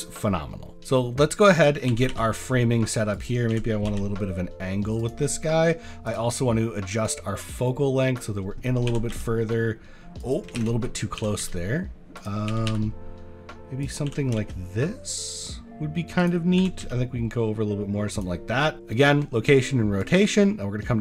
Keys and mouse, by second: 0.6 middle click, 0.8 r, 0.8 z, 1.9 r, 2.1 y, 3.1 click, 3.5 r, 3.9 x, 6.1 click, 7.2-8.2 drag, 8.9 r, 9.1 z, 10.6 ctrl+z, 11.2 r, 11.4 z, 12.5 r, 12.7 y, 14.1 r, 14.3 x, 16.2 click, 16.6 r, 16.8 z, 18.7 click, 20.0-21.0 drag.